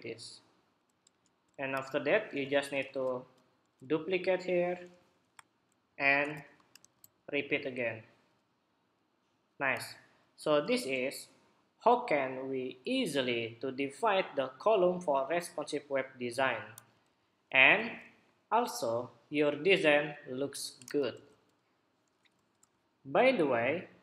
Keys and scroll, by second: 1.4 super+-, 2.6 super+j, 6.6 super+j, 10.3 super+=, 16.8 super+-, 17.6 super+=.